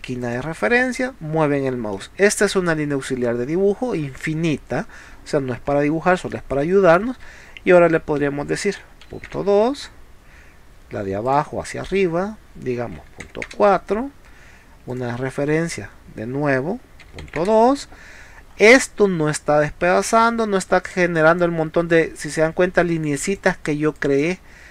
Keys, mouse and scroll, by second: 0.3 click, 1.9 middle click, 3.8 scroll down 1, 4.5 scroll down 1, 4.9-5.3 scroll up 1, 5.6 scroll up 1, 6.3 middle click, 11.3 click, 14.9 click, 18.6 scroll up 1, 20.9 space, 21.2 click, 22.2 click, 23.2 click, 24.0 click.